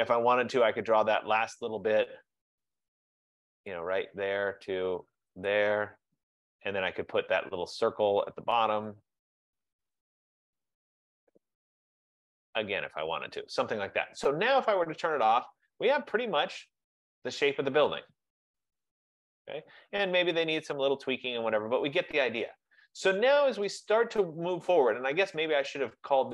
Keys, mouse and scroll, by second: 1.6 click, 3.9 click, 5.6 click, 9.0 click, 13.2 click, 15.4 click, 16.9 F15, 17.6 click, 18.0 click, 25.8 click.